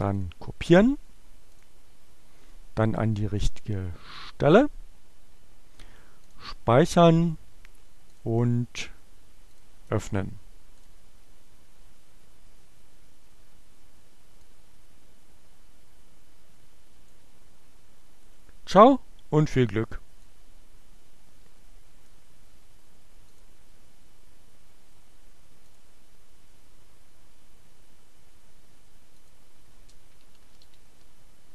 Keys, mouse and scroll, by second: 0.1 click, 1.4 click, 3.1 right click, 4.3 click, 6.3 click, 8.2 click, 9.6 click, 10.0 right click, 10.9 click, 14.3-17.3 drag, 18.5-22.3 drag, 23.4 click, 25.5 click, 28.9 click, 29.5-31.5 typing.